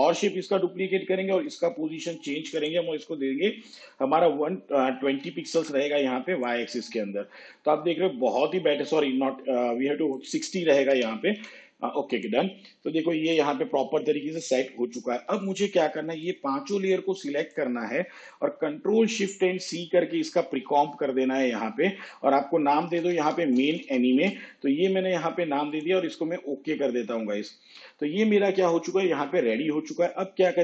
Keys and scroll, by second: 0.3 ctrl+d, 1.6 p, 5.4 2, 11.2 6, 19.3 ctrl+shift+c, 22.9-24.9 typing.